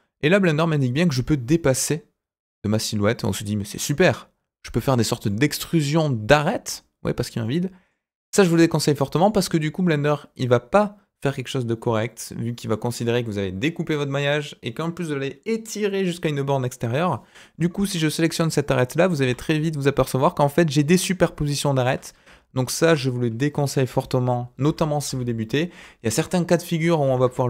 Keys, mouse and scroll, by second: 5.2 middle click, 6.1 scroll up 1, 6.4 middle click, 7.4 middle click, 9.1 click, 18.3 click, 19.2 g, 23.8 ctrl+z, 24.6 ctrl+z, 25.0 ctrl+z, 27.0 ctrl+z.